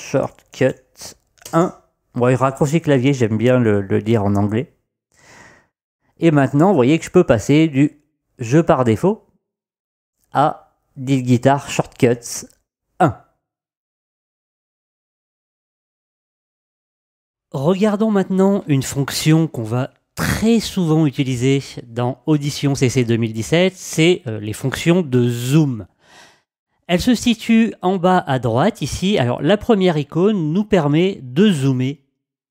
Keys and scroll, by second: 0.0-1.6 typing.